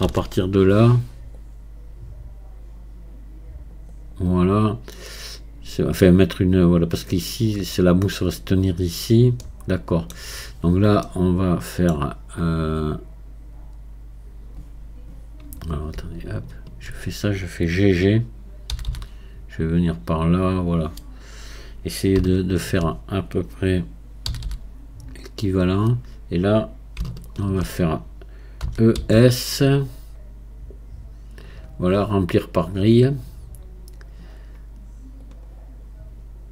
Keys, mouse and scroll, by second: 0.0 ctrl+r, 9.4-12.3 middle drag, 12.3-15.5 scroll up 2, 16.4-21.7 alt+drag, 22.4-36.5 alt+drag.